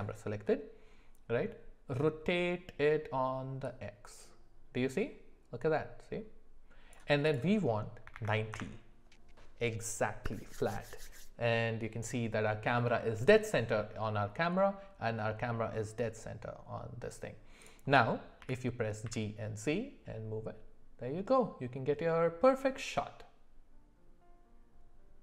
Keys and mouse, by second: 3.6-6.9 drag, 7.3-8.5 drag, 14.6-17.3 middle drag, 18.4 g.